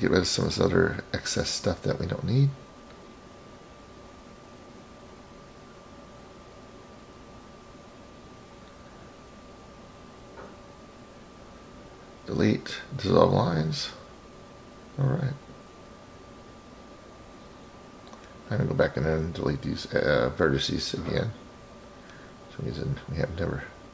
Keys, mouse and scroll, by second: 0.3 click, 0.9 click, 1.5 click, 6.1 shift+click, 6.8 shift+click, 7.5-8.3 middle drag, 8.9 shift+click, 9.8-10.5 shift+drag, 11.9 Delete, 14.1 click, 15.6 Delete, 17.6 click, 18.9 Delete, 22.1 scroll down 1, 22.2-22.8 scroll up 3, 22.8 scroll up 4, 23.3 drag.